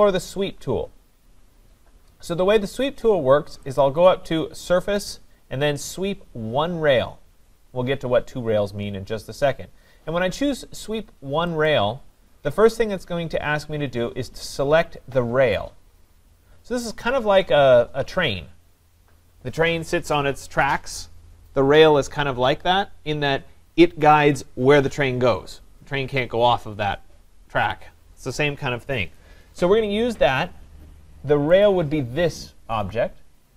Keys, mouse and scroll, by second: 8.8 click, 11.7-16.7 drag, 31.6-33.5 drag.